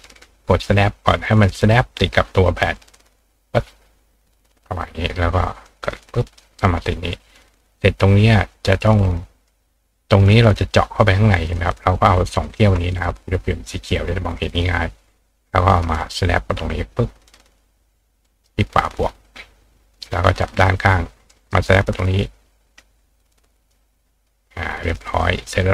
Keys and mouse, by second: 0.2 click, 2.7-4.5 drag, 5.7 click, 6.7 click, 7.1-9.5 drag, 9.8 click, 11.6 click, 12.4 shift+click, 13.8 click, 15.7-18.4 drag, 18.2-21.5 ctrl+right drag, 20.4-23.7 ctrl+drag, 24.8 click, 25.2 click.